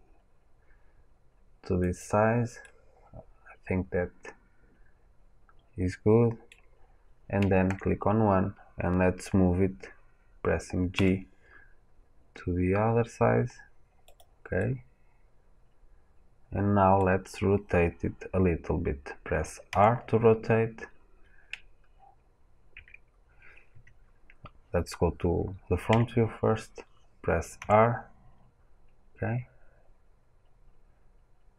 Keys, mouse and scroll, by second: 1.9 click, 2.5-4.1 middle drag, 10.8 g, 14.1 click, 14.5 middle click, 14.9-31.5 middle drag, 19.6 r, 23.7 Escape, 27.0-31.5 drag, 27.5 r.